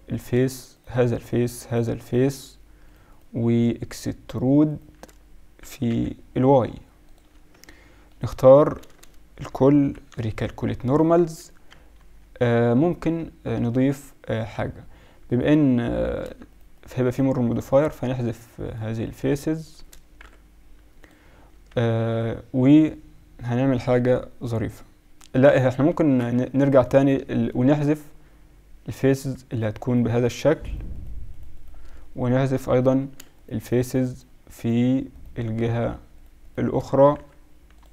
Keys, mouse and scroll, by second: 3.2 shift+click, 5.5 e, 7.3 Tab, 8.3 Tab, 8.7 a, 9.0 a, 9.8 ctrl+n, 10.2 Tab, 11.2 KP_1, 11.7 KP_Subtract, 11.9 KP_Subtract, 12.2 KP_Subtract, 14.4 Tab, 16.1-21.3 right drag, 20.2 x, 21.5 Tab, 22.8 right drag, 25.7 Tab, 26.4 ctrl+z, 26.6 ctrl+z, 27.9 middle click, 32.0-35.5 middle drag, 37.1 x.